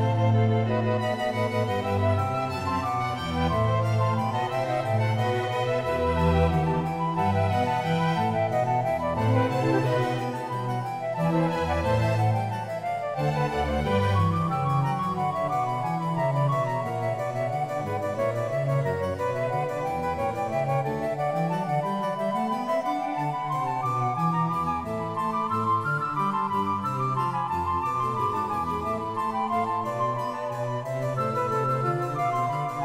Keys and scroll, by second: 19.8 [.